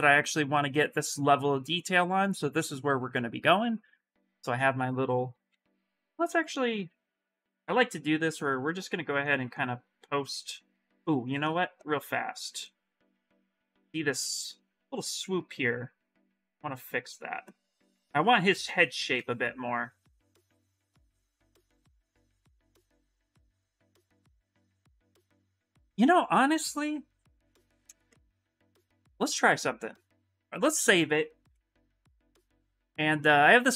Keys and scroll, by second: 7.4 f, 7.6 f, 12.3-13.5 typing, 14.5 s, 32.0 Return, 32.3 Return.